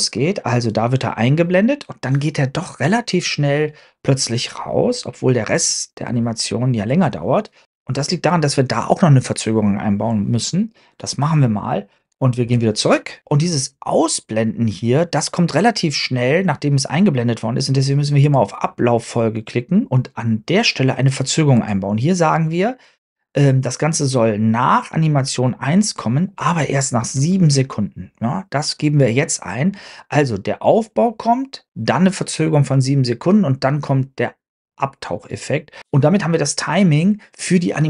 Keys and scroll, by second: 12.4 super+Tab, 12.7 super+Tab.